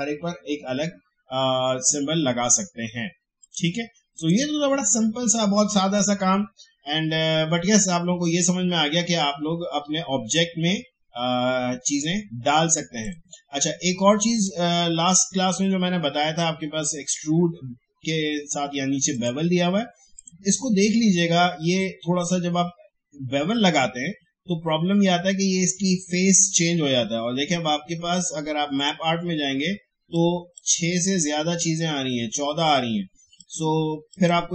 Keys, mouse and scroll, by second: 3.4 click, 8.1-10.9 drag, 13.0 click, 19.1 click, 28.7-33.1 drag, 33.3 click.